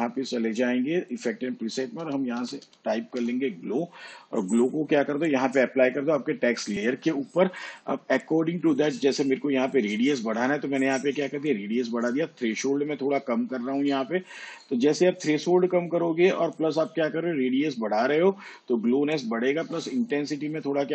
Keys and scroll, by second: 2.1-3.5 typing.